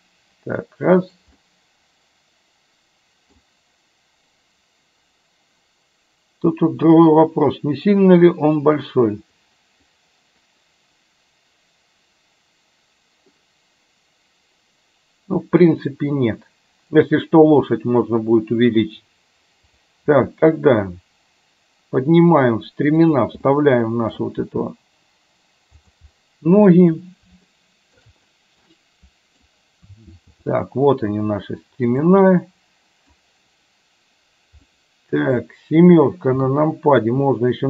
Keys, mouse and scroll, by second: 1.5-3.5 middle drag, 13.5-15.5 middle drag, 19.8 click, 20.1 g, 23.6-24.2 middle drag, 24.3 g, 26.2 middle click, 27.6 shift+middle click, 28.8 middle click, 30.3 g, 32.3 middle click, 34.8 middle click, 36.5 KP_7.